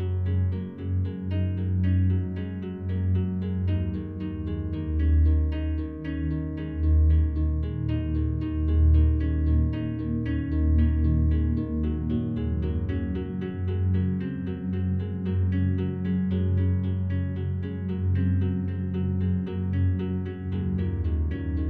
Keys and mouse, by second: 1.3 click, 3.1-4.1 drag, 4.8-6.4 drag, 8.2-9.5 drag, 13.7 click, 14.5 click, 14.8 click, 15.5 click, 18.3-19.0 drag, 20.5 click.